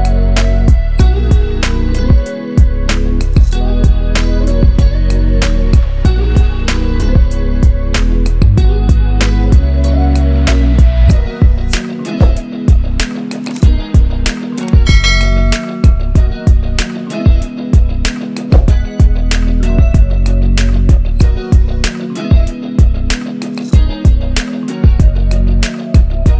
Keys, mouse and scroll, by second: 2.3 ctrl+Page_Up, 3.8 ctrl+Page_Up, 4.3 ctrl+Page_Down, 5.1 ctrl+Page_Up, 6.6 scroll up 1, 7.1 click, 7.9 ctrl+Page_Down, 9.2 right click, 9.7-10.7 scroll down 1, 10.7 click, 12.7 right click, 14.1 click, 15.0 scroll down 1, 15.3 click, 16.6 scroll up 1, 16.9-17.4 scroll down 1, 17.4 scroll up 1, 17.7-18.2 scroll down 1, 18.8 shift+F4, 19.1 click, 20.9-21.3 scroll down 1, 21.9 shift+F4, 22.3 scroll down 1, 22.9-23.5 scroll up 1, 23.5 click, 24.0-24.7 shift+drag.